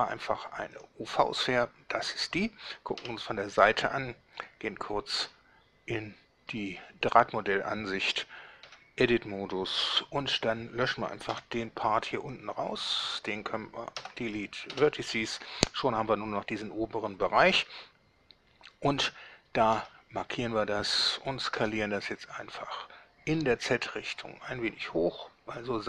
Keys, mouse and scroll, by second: 0.8 click, 3.1 1, 5.4 z, 6.6-7.0 scroll up 2, 8.8 Tab, 9.9 a, 11.4 b, 12.4-13.2 drag, 14.2 Delete, 14.8 Return, 19.8 Tab, 21.7 s, 23.4 z.